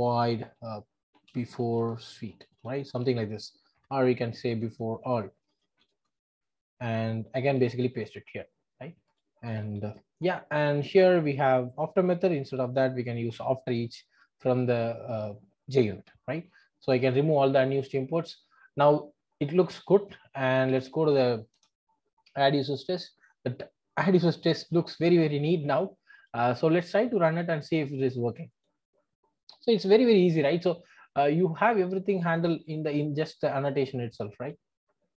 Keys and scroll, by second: 7.5 super+v, 15.2 alt+Return, 16.8 ctrl+alt+o, 21.5 super+e.